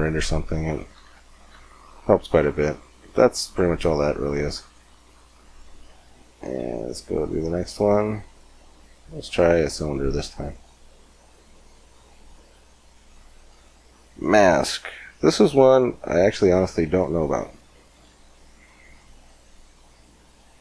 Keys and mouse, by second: 0.9 Tab, 3.3 click, 4.4 right click, 4.6 x, 6.0 click, 6.4 shift+a, 11.8-14.6 drag, 17.2-20.6 middle drag.